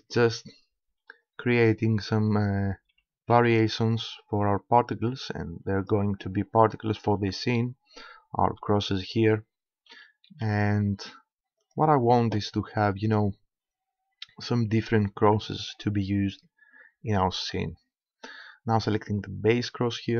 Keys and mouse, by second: 0.2 a, 0.9 b, 2.9 g, 5.9-7.7 drag, 7.2 a, 8.4 b, 9.9 g, 11.7-13.7 drag, 15.4 Tab, 19.6-20.1 right drag.